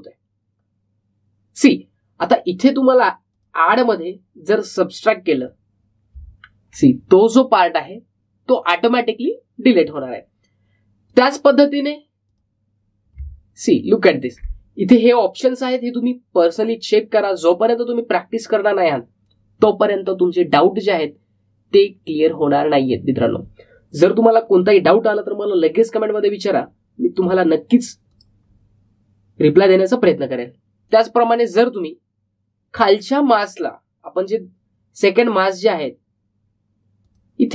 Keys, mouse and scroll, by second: 3.1 click, 7.3-7.7 alt+scroll down 1, 12.0 click, 14.4-15.2 alt+scroll up 1, 16.4 click, 28.1 click, 31.8 click.